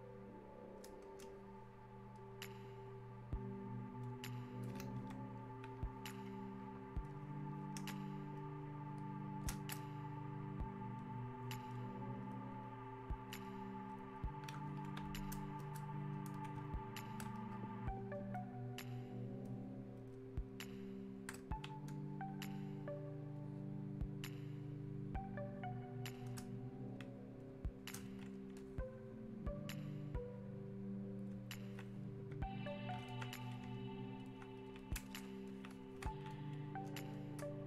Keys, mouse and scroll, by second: 4.1 click, 5.0 Escape, 7.1 click, 7.9 space, 8.4 click, 8.4 space, 12.3-13.9 shift+drag, 17.1 shift+click, 18.3-20.1 shift+drag, 23.4-32.7 drag, 33.1 alt+click, 34.2 alt+click, 36.3-37.6 drag.